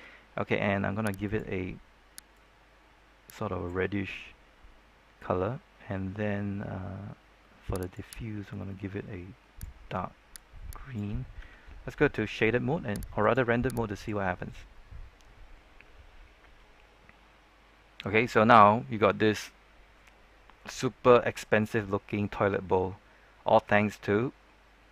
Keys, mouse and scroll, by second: 1.2-10.3 drag, 11.3 z, 13.1-24.9 drag.